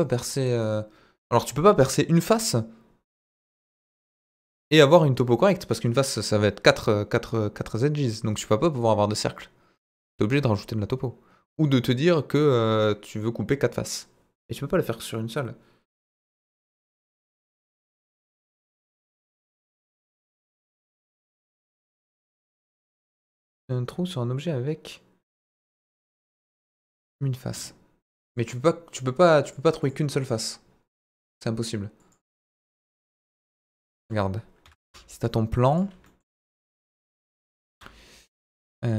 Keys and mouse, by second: 28.3-29.3 drag, 29.4-31.2 drag, 32.1-33.6 drag, 33.8 middle drag, 34.6 Delete, 34.7 shift+a, 36.0 middle drag, 37.3 KP_7, 37.7 Tab.